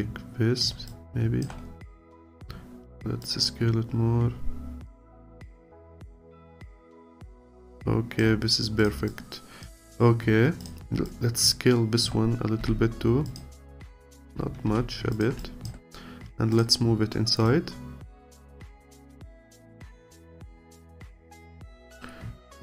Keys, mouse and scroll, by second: 0.9 alt+click, 1.6-2.0 scroll up 1, 2.0 alt+click, 2.4-3.2 scroll up 1, 3.2 click, 5.1-6.8 alt+drag, 6.8 scroll down 2, 7.1-8.4 alt+drag, 8.4-8.8 scroll down 1, 8.8 click, 9.1 alt+click, 9.9-10.2 scroll up 1, 10.6 click, 11.1-12.6 alt+drag, 12.6 s, 13.7 alt+click, 14.7 s, 15.4-17.5 alt+drag, 18.9-20.2 alt+drag, 21.9 click, 22.4 alt+middle click.